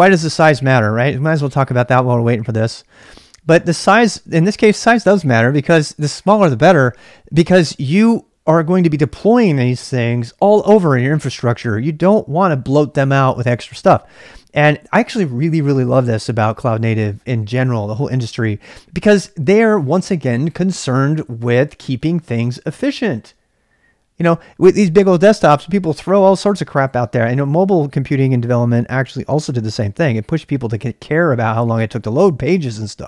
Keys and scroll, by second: 1.5 typing.